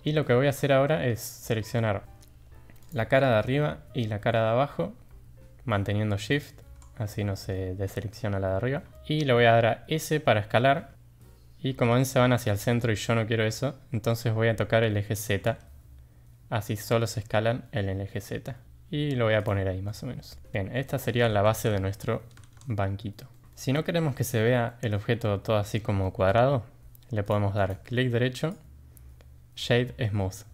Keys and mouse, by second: 0.6-1.1 middle drag, 1.5 3, 2.0 middle drag, 2.9 click, 3.6-4.3 middle drag, 7.1-7.5 middle drag, 8.9 shift+middle click, 10.1 s, 19.9 middle click, 20.8-21.1 middle drag, 22.3 Tab, 23.3 click, 23.5 shift+drag, 24.7 middle drag, 26.0 middle drag, 27.6 click, 28.3-30.5 drag.